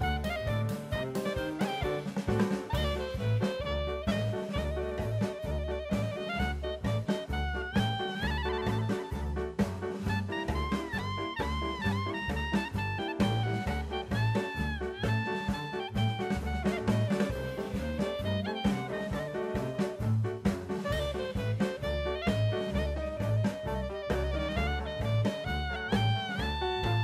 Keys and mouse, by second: 0.2 n, 2.5-2.8 middle drag, 3.5 shift+middle drag, 4.1 click, 5.3 click, 9.5 click, 11.4 shift+middle drag, 11.9 click, 13.7 drag, 17.1 click, 23.5-24.2 middle drag, 24.9 click, 25.7 click, 26.1 click, 26.6 click.